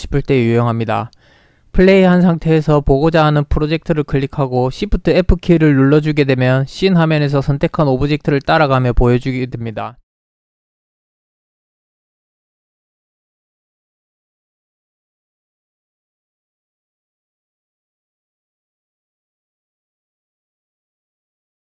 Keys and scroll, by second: 7.1 f, 12.4 f, 15.4-21.2 typing.